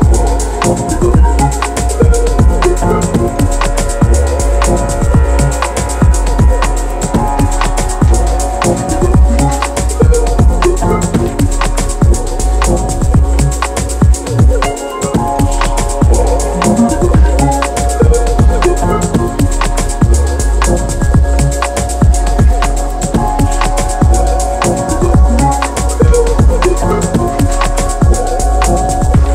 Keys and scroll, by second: 21.7 x, 21.8 Return, 27.5 g.